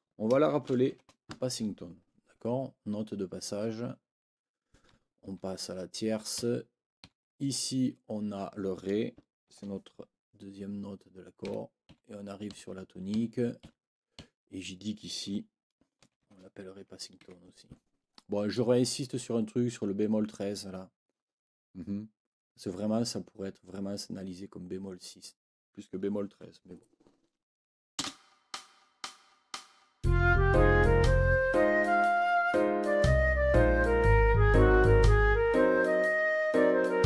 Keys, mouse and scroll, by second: 0.4-1.4 typing, 5.2 Right, 6.4 Right, 7.0 Right, 11.4 Right, 15.8-16.7 typing, 17.2 Escape, 18.5 click, 28.0 space.